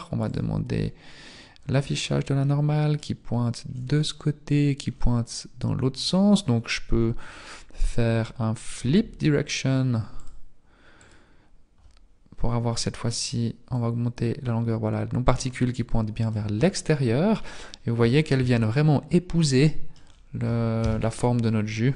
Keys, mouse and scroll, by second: 0.3 click, 0.3 n, 1.5 scroll up 1, 2.4 middle click, 3.5 middle click, 3.5-4.6 scroll up 9, 4.9-5.6 scroll down 5, 11.1 click, 11.1 t, 13.8 click, 18.0 Tab, 18.4 Tab, 19.4 middle click, 20.0-20.8 scroll down 2, 20.8 scroll down 3, 20.8 KP_Decimal, 21.6-21.9 scroll down 8.